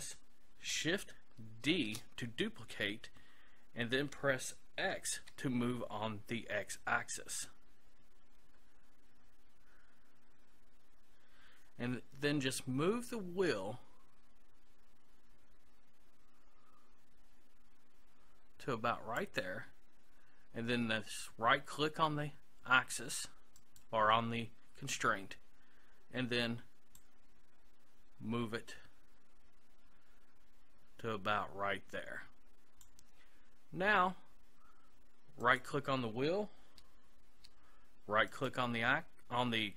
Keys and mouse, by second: 1.7 shift+d, 19.4-21.3 drag, 23.6-25.5 right drag, 27.0-28.8 drag, 35.5-39.7 right drag.